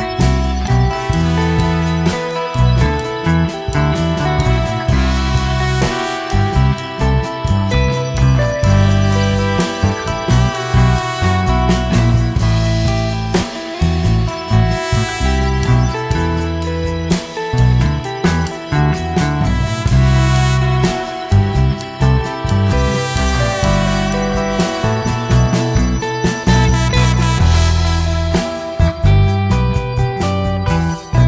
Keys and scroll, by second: 0.1 m, 0.1 space, 1.4 Escape, 1.8 m, 1.9 space, 3.2 Escape, 4.2 Escape, 4.3 Escape, 4.4 Escape, 4.5 Escape, 4.7 Escape, 4.7-5.9 typing, 5.7 Escape, 8.3 Escape, 8.3 Escape, 8.6 Escape, 8.8 Escape, 8.9 Escape, 9.7 Escape, 11.5 Escape, 12.0 e, 12.4 Escape, 13.1 Escape, 13.8-18.2 typing, 14.6 Escape, 16.2 Return, 16.9 Return, 17.4 Escape, 20.4 Escape, 24.4 m, 24.4 space, 27.9 Escape, 30.0 typing.